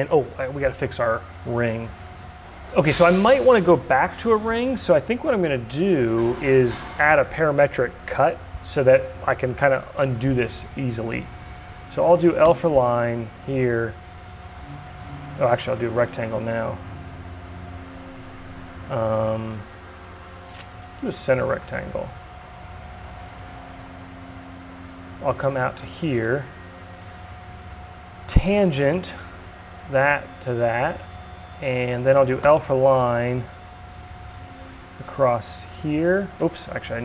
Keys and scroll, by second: 31.9 l, 36.0 ctrl+z.